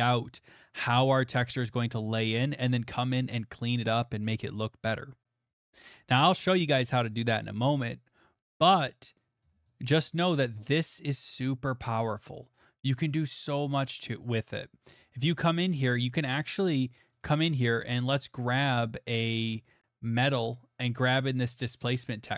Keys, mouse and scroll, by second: 1.6 middle click, 6.9 middle click, 9.2 click, 9.4-10.0 scroll, 10.6 middle click, 13.5 middle click, 13.6 middle click, 13.7 middle click, 13.7 middle click, 13.9 middle click, 14.2 middle click, 14.9 middle click, 14.9 middle click, 15.0 middle click, 15.0 middle click, 15.3 scroll, 17.2 click, 18.1 click, 19.6 click, 19.7 click, 20.4 middle click, 21.1 click.